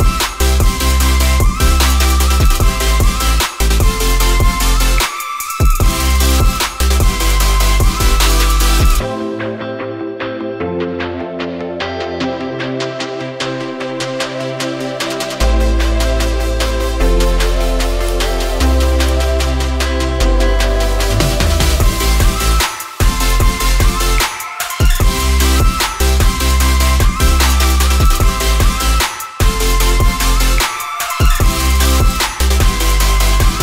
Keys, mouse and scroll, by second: 0.1 shift+click, 9.6 Return, 20.5 shift+click, 26.7 Return, 29.4 shift+click, 30.9 ctrl+j.